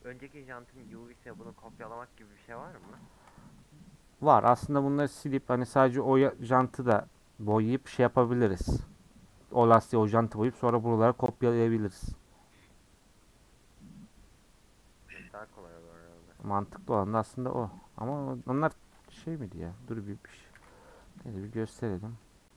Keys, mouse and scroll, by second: 0.2 Tab, 1.1 middle click, 1.5 scroll down 3, 1.7 middle click, 2.1-2.6 scroll up 1, 2.6-3.5 scroll up 1, 3.5-4.5 scroll down 3, 4.5 Tab, 18.1-18.7 middle drag, 18.7-20.5 scroll down 1, 20.5 alt+h, 21.0 click, 21.2-22.3 shift+middle drag, 22.3-22.5 scroll up 1.